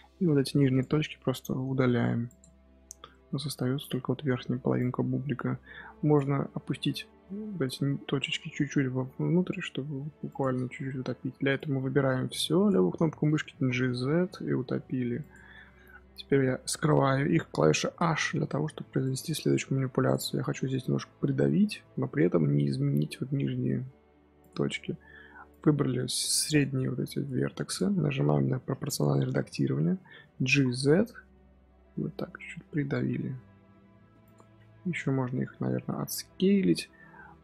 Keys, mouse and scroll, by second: 1.8 x, 2.7 z, 3.0 shift+middle click, 3.3-3.8 scroll up 2, 4.3 z, 4.7 click, 6.5-8.7 scroll up 2, 8.7 g, 10.6 Tab, 11.1 Tab, 11.5 click, 13.4 g, 17.8 h, 18.9 click, 24.3 click, 25.4 click, 27.2 click, 30.3 g, 35.9-37.4 scroll down 1.